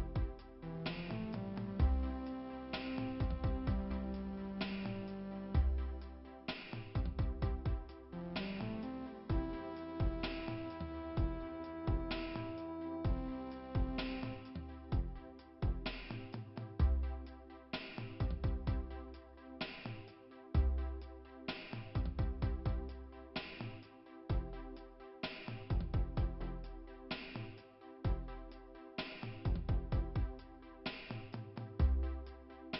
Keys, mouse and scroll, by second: 2.3 click, 3.2 click, 4.4 click, 4.8 click, 5.2 click, 6.2 click, 7.1 click, 7.1 click, 8.1 click, 9.6 0, 10.2 Return, 12.2 click, 13.2 click, 14.8 click, 15.3 click, 15.9 click, 16.2 click, 16.3 double click, 17.0 double click, 20.2 click, 20.7 click, 22.5 click, 23.6 click, 24.1-26.2 typing, 28.1 click, 29.4 click, 30.4 click, 31.2 click.